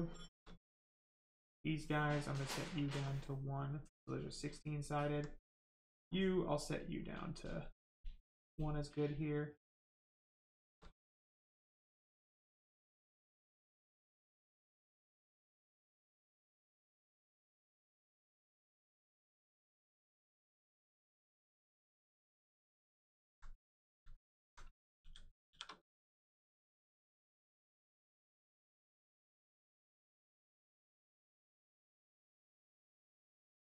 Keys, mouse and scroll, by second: 0.7 alt+click, 1.3 alt+right click, 2.1 click, 2.2 click, 3.5 right click, 6.3 click, 9.0 alt+click, 9.9 right click, 10.9 alt+click, 11.5 right click, 12.6 click, 14.9 click, 18.1 alt+right click, 19.3 right click, 19.3 right click, 20.7 alt+click, 21.4 right click, 21.9 shift+right click, 22.3 alt+right click, 24.9 shift+f, 25.8 f, 25.9 right click, 26.6 alt+right click, 27.9 right click, 27.9 right click, 28.1 shift+right click, 29.0 alt+click, 29.5 right click, 30.8 shift+right click, 32.4 right click, 32.5 right click, 33.1 shift+right click.